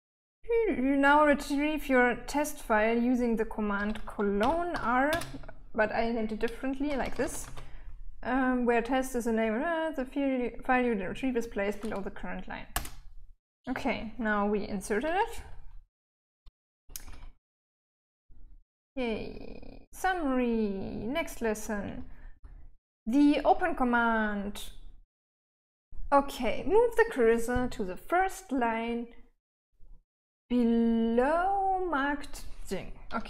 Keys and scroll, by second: 4.8-5.6 typing, 7.1-8.6 typing, 13.1 Return, 15.8-23.3 typing.